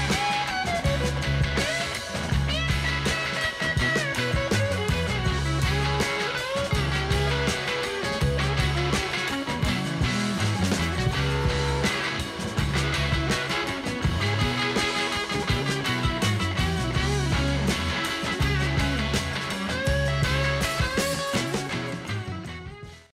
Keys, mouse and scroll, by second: 2.7 click, 6.6 click, 8.7 click, 10.3 click, 10.8 click, 11.3 click, 13.3 click, 13.9 click, 17.3 click, 19.4 click.